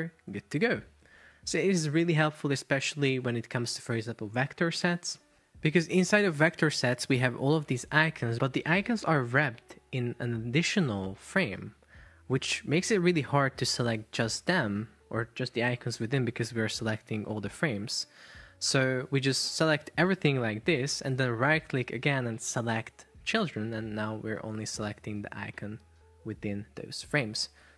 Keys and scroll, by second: 1.5 Up.